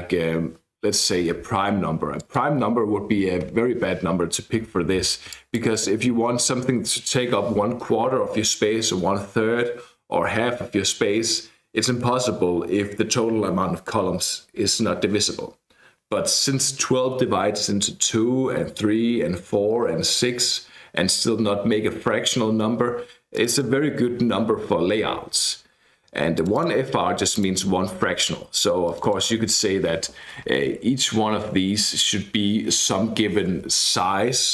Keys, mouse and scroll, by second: 2.2 click, 3.5 alt+F12, 5.3 click, 23.3 click, 26.4 click, 27.3 click, 28.9 click, 32.2 Left.